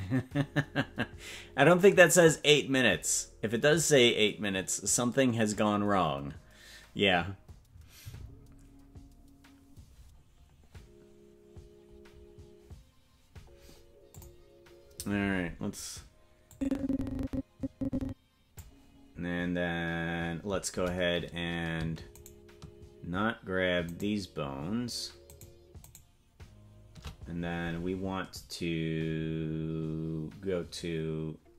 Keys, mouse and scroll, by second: 14.1 click, 16.5-18.6 drag, 22.4-27.0 shift+right drag.